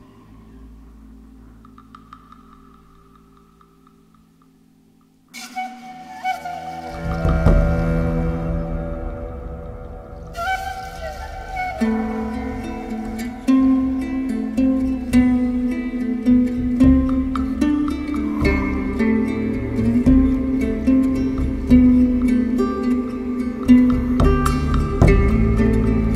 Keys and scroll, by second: 1.4 4, 8.0 3, 14.5 4, 15.7 3, 24.8 ctrl+z.